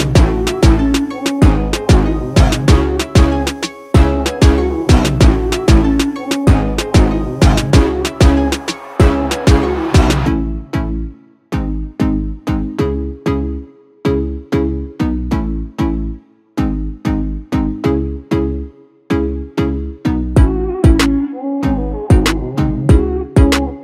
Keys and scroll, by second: 6.0 5, 7.0 Return, 14.9 2, 16.5 Return.